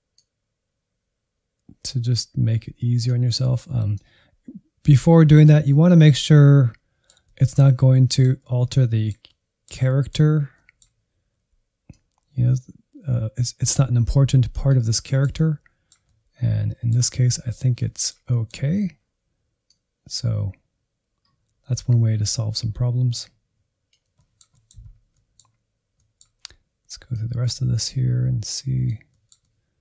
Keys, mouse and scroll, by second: 0.2-5.6 drag, 5.6-10.3 middle drag, 10.3 scroll down 2, 10.5-11.9 middle drag, 11.9-14.8 drag, 15.0-17.1 middle drag, 17.1-17.9 scroll up 3, 17.9 middle click, 18.6-19.7 scroll down 1, 19.7-24.1 drag, 24.1 middle click, 24.8-25.1 scroll down 2, 25.1-27.2 middle drag, 27.2-29.0 drag, 29.0-29.8 middle drag.